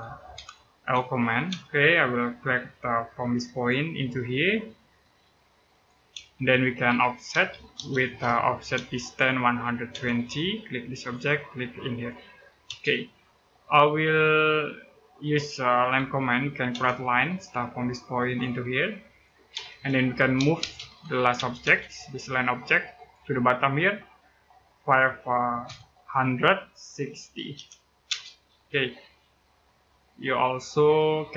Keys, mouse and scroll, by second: 0.1 l, 1.3 space, 3.3 click, 5.9-8.5 typing, 10.7 click, 12.4 space, 12.8-13.7 scroll up 1, 15.7 l, 16.5 space, 16.8-17.6 scroll up 1, 18.0 click, 19.3-21.1 typing, 22.8 click, 25.5 5, 26.9-27.8 typing, 29.7 scroll down 1, 29.9 middle click, 31.2-31.3 typing.